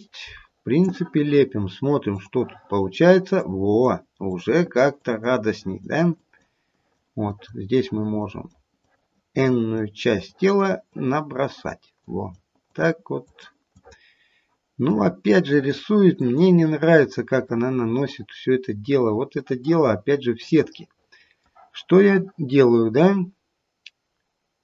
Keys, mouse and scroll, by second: 2.3 click, 3.4 click, 4.3 click, 5.0 click, 5.5 click, 6.1 click, 6.7 click, 7.2 click, 8.2 click, 8.8 click, 9.4 click, 10.2 click, 10.9 click, 11.5 click, 12.0 click, 12.7 click, 13.2 click, 13.7 click, 14.9 click, 15.4 click, 16.2 click, 16.9-17.9 scroll down 2, 17.9 middle click, 18.7-19.3 scroll up 2, 19.4 middle click, 20.7 middle click.